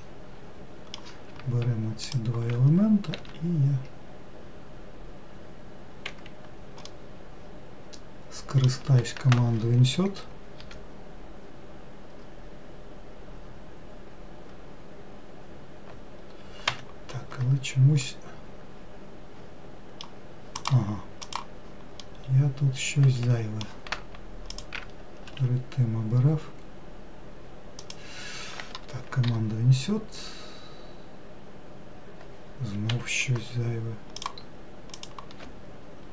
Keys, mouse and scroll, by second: 0.2-2.4 middle drag, 2.4 ctrl+click, 3.4 s, 7.2-10.3 middle drag, 17.6-18.3 scroll up 1, 18.3-20.9 middle drag, 20.9 click, 21.5 click, 22.3-24.8 middle drag, 24.8 ctrl+click, 25.6 s, 34.5 click, 35.3 click.